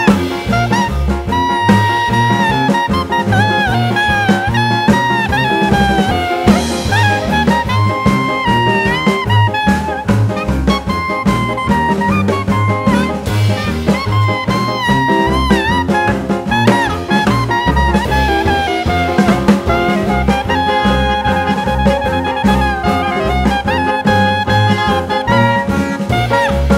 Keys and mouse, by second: 4.2-6.0 drag, 10.4-11.8 drag, 10.4 right click, 11.4 right click, 12.8 click, 13.7 click, 14.1 click, 15.6-17.7 drag, 20.7 click, 21.4 click, 21.6-24.8 drag, 26.1-26.7 drag.